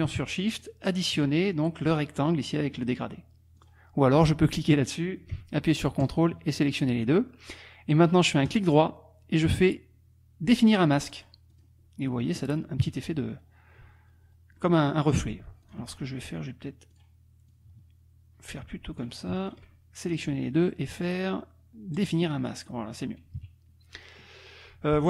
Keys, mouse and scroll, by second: 0.5 shift+click, 3.6 click, 4.5 click, 6.0 ctrl+click, 8.5 right click, 11.2 click, 11.5 click, 12.8 KP_Subtract, 14.6 click, 15.4 ctrl+z, 15.6 ctrl+click, 16.9 click, 17.5-19.2 drag, 19.4 shift+click, 20.1 click, 21.9 click, 22.3 click, 22.7 click, 23.4 KP_Subtract, 24.0 click.